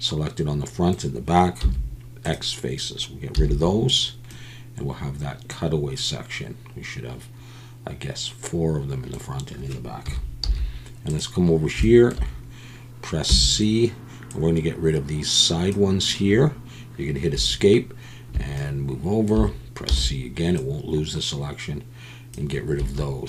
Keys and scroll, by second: 1.6 x, 3.3 z, 10.0 KP_1, 10.4 z, 13.3 c, 17.3 Escape, 19.9 c, 22.8 Escape.